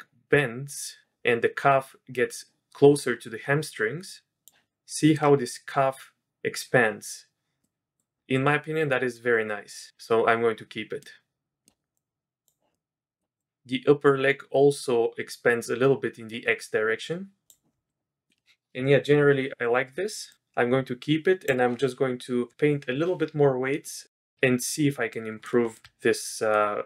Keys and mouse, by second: 4.1 click, 4.9 click, 7.6-8.0 drag, 11.0-11.7 drag, 12.0 click, 12.7-13.2 middle drag, 13.4 click, 17.9-18.3 drag, 20.3 click, 23.9-24.7 drag, 25.1 drag, 25.7 shift+click, 26.4 drag.